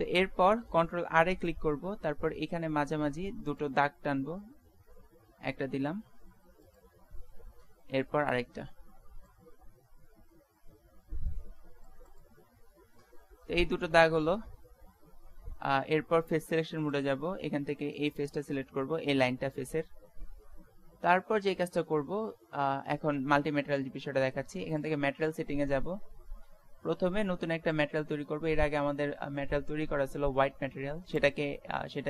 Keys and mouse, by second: 0.0 middle click, 1.6 ctrl+r, 7.7 ctrl+r, 12.7-14.5 middle drag, 14.9-16.9 middle drag, 16.9-18.9 drag, 18.0-20.0 right drag, 20.1-24.7 middle drag, 24.7-26.7 drag, 27.7-29.5 drag.